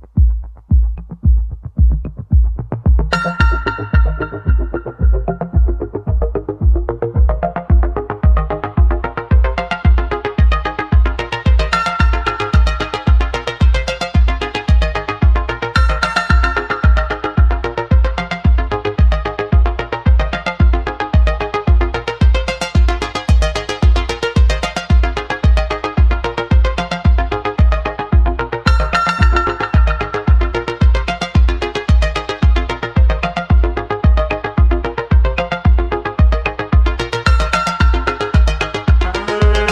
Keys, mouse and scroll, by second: 0.4-3.0 scroll down 2, 3.6 Tab, 4.2 shift+a, 6.4 shift+a, 8.6 s, 12.7 Tab, 13.7 1, 14.0 click, 17.9 g, 20.9 s, 24.5 click, 24.8 click, 26.4 g, 29.2 s, 30.9 middle click, 31.9-32.4 scroll down 2, 32.4-34.7 shift+middle drag, 34.7-35.5 scroll up 4, 35.5 click, 36.2 click, 36.7 middle click, 37.6 2, 38.0 click, 38.7-39.7 middle drag.